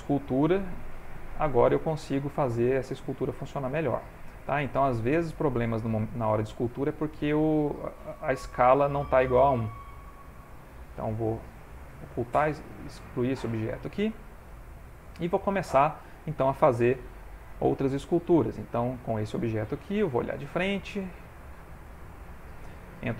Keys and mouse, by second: 0.7 f, 1.8 click, 2.7 click, 5.0 click, 5.2 click, 5.4 click, 7.1 click, 7.4 click, 9.3 click, 9.4 Tab, 9.9 x, 10.8 Tab, 11.3 x, 12.4 ctrl+Tab, 13.3 x, 14.2 shift+middle click, 14.7 middle click, 15.6 ctrl+middle click, 17.1 shift+middle click, 17.8 ctrl+middle click, 18.8 click, 20.7 click, 21.3 ctrl+middle click, 22.6 ctrl+Tab.